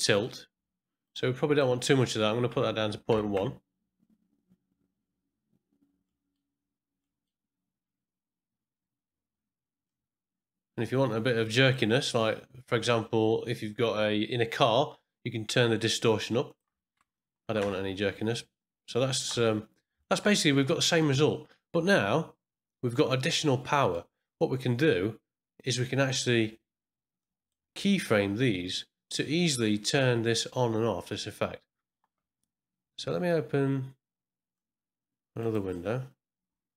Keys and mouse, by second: 1.4-5.5 drag, 6.0 middle click, 7.0 middle click, 9.8-11.7 drag, 16.4-18.3 drag, 20.0 ctrl+middle click, 20.3 middle click, 22.9 middle click, 23.7 middle click, 27.2 click, 34.5 click, 35.3 click, 36.5 click.